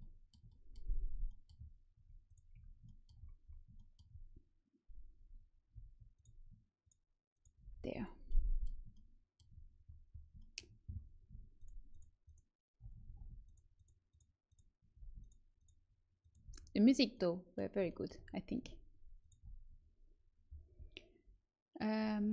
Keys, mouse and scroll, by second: 0.6-1.9 middle drag, 1.9 Tab, 2.5 Tab, 6.1-7.3 right drag, 7.3-9.1 middle drag, 11.5-16.8 right drag, 13.0 ctrl+z, 16.8 middle click, 17.8 right click, 19.1-20.8 right drag.